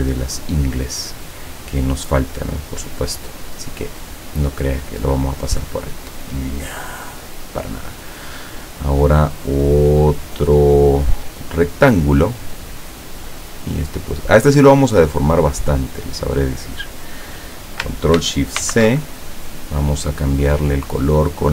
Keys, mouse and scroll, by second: 5.7 click, 9.9-17.2 drag, 18.7 ctrl+shift+c.